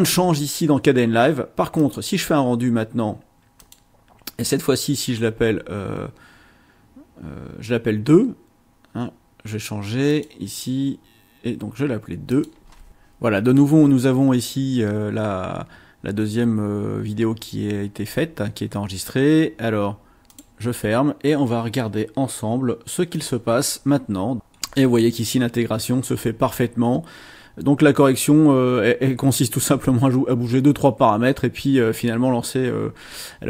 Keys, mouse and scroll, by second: 1.7 click, 3.6 click, 10.1 click, 12.3 click, 12.9 click, 20.3 click, 23.1-24.3 drag.